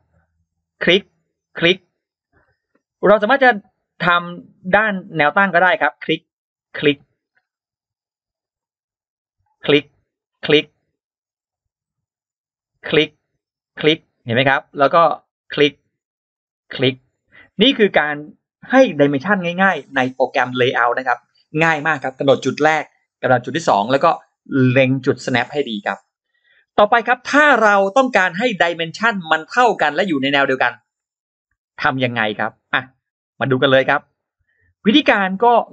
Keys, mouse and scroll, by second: 0.6 click, 1.4 click, 1.9 click, 2.2 scroll down 2, 2.9 scroll up 2, 3.5 scroll up 2, 4.5 click, 5.6 click, 6.5 click, 6.7 scroll down 2, 7.2 scroll up 2, 8.2 click, 9.3 click, 10.0 click, 10.3 scroll down 2, 10.8 scroll up 2, 12.4 click, 13.4 click, 13.8 click, 15.1 click, 16.2 click, 17.0 click, 17.3 scroll down 2, 17.7 scroll up 2, 26.1 scroll down 2, 28.1 click, 29.0 click, 31.0-32.8 drag, 33.0-34.0 scroll up 2, 34.5 click, 35.3 click.